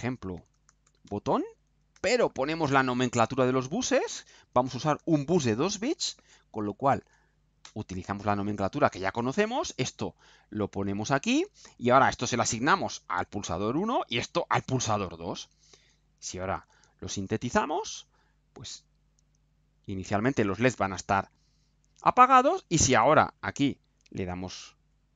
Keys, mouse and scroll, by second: 0.1-1.5 typing, 4.5 1, 5.1 shift+., 6.0 0, 7.6 Return, 10.9 click, 11.9 click, 13.1 click, 13.9 click, 14.7 click, 16.6 ctrl+u.